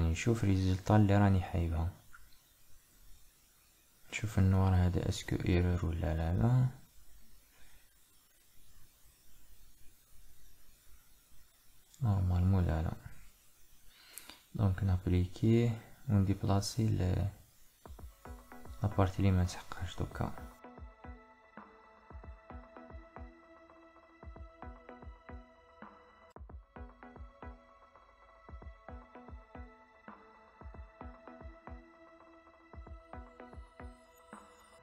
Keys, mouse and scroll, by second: 0.0-3.0 middle drag, 12.8-34.8 drag.